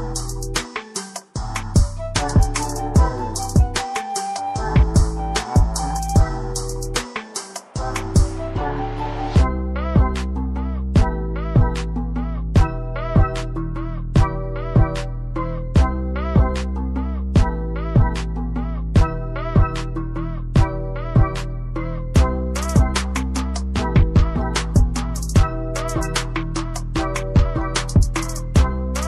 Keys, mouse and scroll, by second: 0.3 scroll up 1, 0.4-1.4 scroll down 1, 2.4 click, 3.0 scroll up 1, 4.0 click, 4.7 scroll down 1, 5.2 scroll up 1, 5.7 scroll down 1, 6.2 click, 9.8 ctrl+z, 10.4 click, 13.4 scroll up 1, 13.8 scroll down 1, 14.1 click, 14.8 scroll down 1, 15.2 click, 17.2 ctrl+c, 17.4 typing, 18.2 click, 26.7 click.